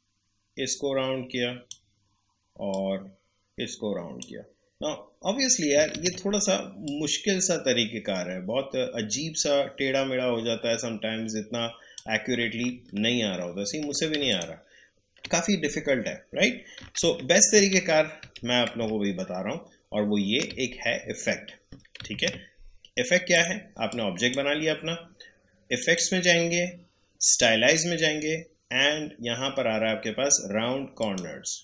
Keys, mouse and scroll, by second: 2.7-12.8 drag, 12.8 alt+scroll down 1, 14.2 alt+scroll up 1, 14.3 ctrl+click, 21.2-21.5 alt+scroll down 1, 23.3 click, 31.0 click.